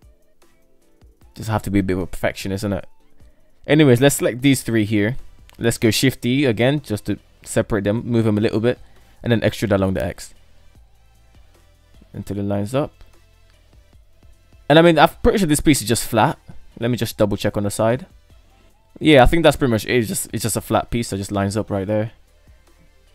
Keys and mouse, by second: 1.8 right click, 2.4 shift+middle click, 3.5 ctrl+right click, 4.1 shift+middle click, 5.1 shift+d, 8.1 e, 10.3 shift+middle click, 12.0 shift+middle click, 14.7 Tab, 15.5 alt+z, 15.9-16.5 middle drag, 17.1 right drag, 17.9-20.3 middle drag, 20.7 KP_3, 22.5-23.1 middle drag.